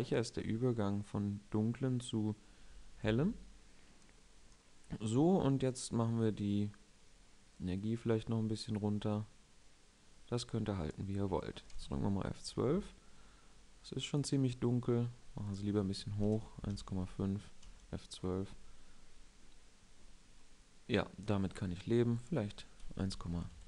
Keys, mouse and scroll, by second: 0.1 right click, 0.3 click, 11.6 F12, 13.4 F12, 17.3 F12.